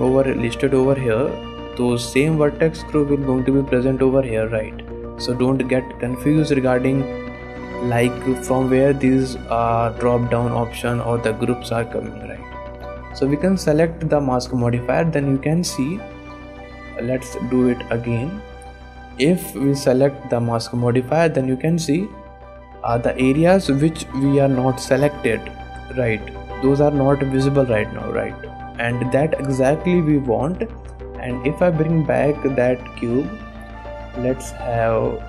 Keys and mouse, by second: 1.8 click, 3.5-6.7 drag, 8.5-9.7 drag, 10.1-13.9 drag, 15.1 middle click, 15.9 shift+middle click, 17.9 shift+middle click, 18.1 middle click, 18.6 shift+click, 19.2-20.5 drag, 21.1 middle click, 21.5 shift+drag, 21.8 middle click, 22.7 drag, 28.1 drag, 28.6 shift+click, 29.5 drag, 32.2 click, 33.7-35.2 drag.